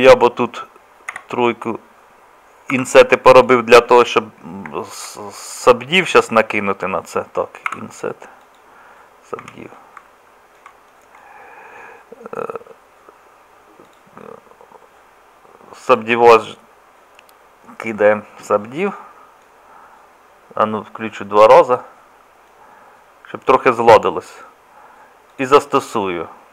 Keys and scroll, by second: 1.1 3, 2.7 i, 7.7 i, 9.4 Tab.